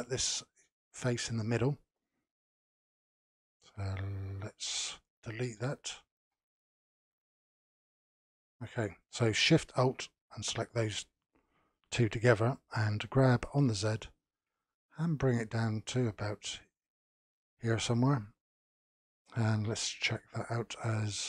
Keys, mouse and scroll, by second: 2.5-5.6 drag, 7.3-7.8 scroll down 3, 7.8-10.3 middle drag, 10.3 alt+shift+click, 13.0 g, 19.0-21.2 drag.